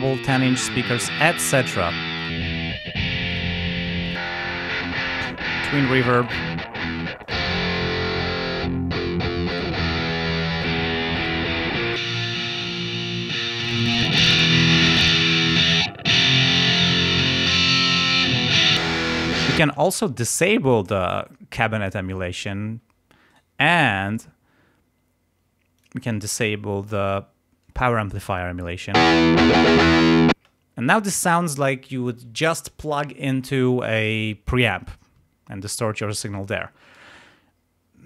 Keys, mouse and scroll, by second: 1.0 right click, 2.1 click, 3.3 right click, 4.0 click, 6.1 scroll up 1, 6.2 right click, 7.2 click, 9.5 right click, 10.5 click, 11.1 right click, 11.9 click, 13.5-15.7 drag, 17.4-17.8 scroll up 1, 18.7 click, 19.6 space, 23.3 right click, 25.8 click, 29.0 space, 30.3 space.